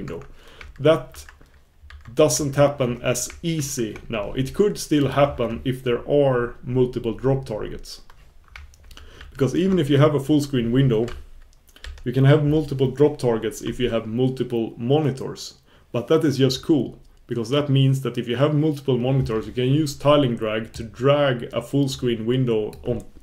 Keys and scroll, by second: 1.1 super+1, 3.5 super+1.